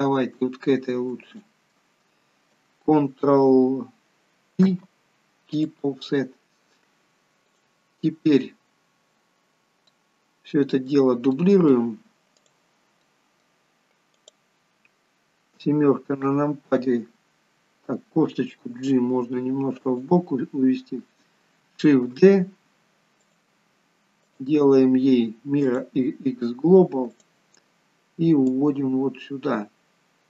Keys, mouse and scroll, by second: 0.0 shift+click, 7.6 ctrl+p, 7.6 click, 9.1 scroll up 2, 9.6 scroll down 2, 10.0 middle click, 11.5 middle click, 12.6 click, 13.2 middle click, 14.2 click, 15.7 KP_7, 18.8 g, 24.3 right click, 24.3 shift+d, 27.3 click, 28.7 click.